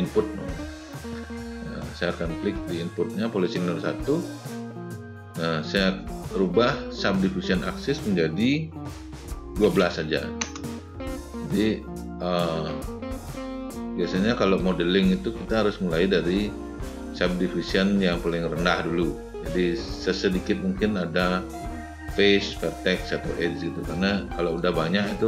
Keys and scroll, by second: 9.4 1, 9.6 2.